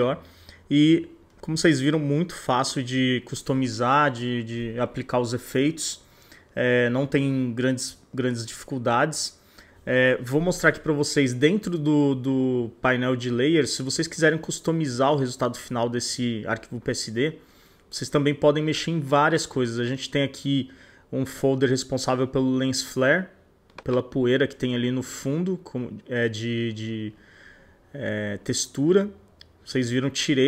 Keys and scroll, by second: 5.0 super+=.